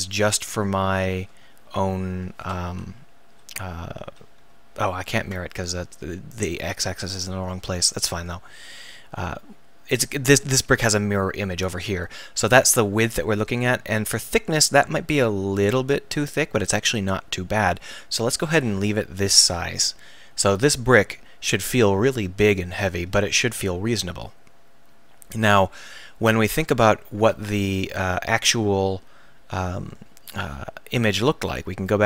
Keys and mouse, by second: 1.5 z, 2.1 z, 2.6 KP_1, 4.0 z, 4.4 z, 6.6-8.3 drag, 22.1-22.6 middle drag, 22.9-26.9 middle drag.